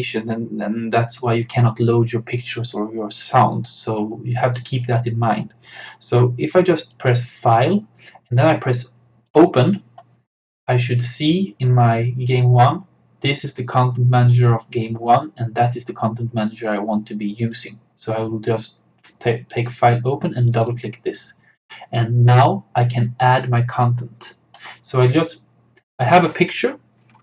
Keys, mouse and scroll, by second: 6.8 click, 9.5 click, 17.5 click, 20.5 click.